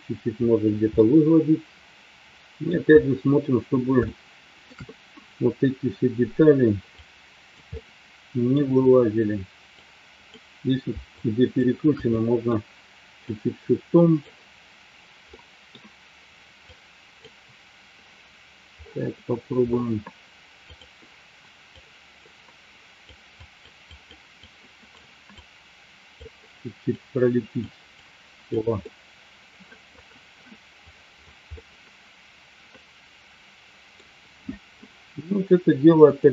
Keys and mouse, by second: 1.3-2.7 middle drag, 4.1 shift+middle click, 7.7 middle click, 9.7 click, 11.0 shift+click, 12.0 middle click, 13.3-14.5 drag, 15.2 middle click, 16.5 click, 21.7-23.0 drag, 23.3 click, 23.9 click, 24.4 click, 25.3 click, 27.9 click, 28.8-29.9 middle drag, 31.4-34.7 middle drag.